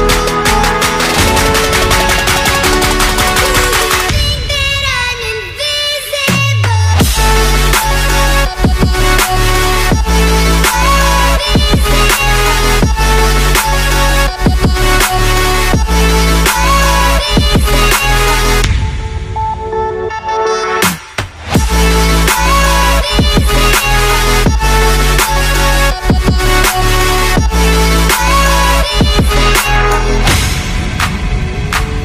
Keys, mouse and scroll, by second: 0.0-3.0 typing, 5.8 shift+click, 14.3 double click, 19.5 double click, 24.1 right click.